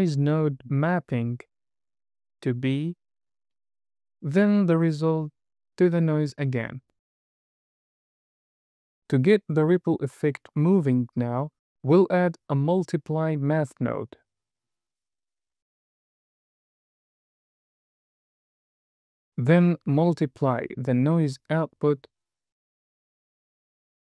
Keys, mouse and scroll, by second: 1.7 drag, 3.7 middle click, 7.4 click, 8.1 drag, 9.0-9.3 scroll down 2, 9.2 middle click, 9.6 click, 11.8 shift+a, 12.7 BackSpace, 15.6 drag, 15.9-16.6 scroll up 3, 17.0-18.6 drag, 22.9 drag.